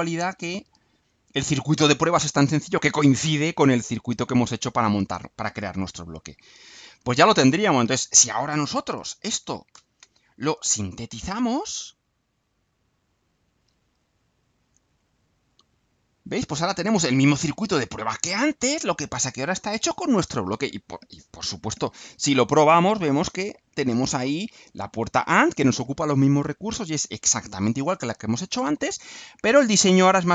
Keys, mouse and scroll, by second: 0.6 click, 1.4 click, 9.7 ctrl+u, 12.4 click, 14.6 click, 15.9 scroll down 1, 16.3-18.8 right drag.